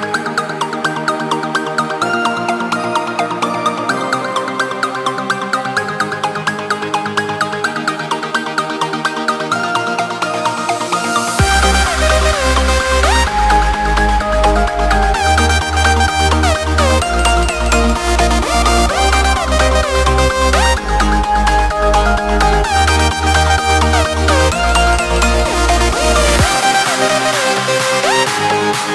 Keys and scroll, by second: 2.2 ctrl+shift+], 5.1 ctrl+space, 7.8 ctrl+shift+], 9.0 ctrl+space, 9.8 ctrl+3, 11.0 ctrl+shift+], 11.4 ctrl+alt+3, 11.9 ctrl+space, 13.1 ctrl+3, 14.2 ctrl+shift+], 14.4 ctrl+alt+3, 15.2 ctrl+space, 27.3 ctrl+space.